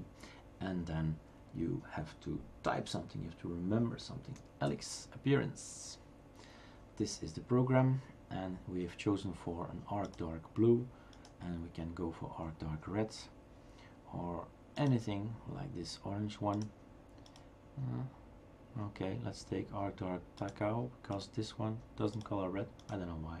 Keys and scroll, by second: 4.4 typing, 5.6 Return, 6.6 typing.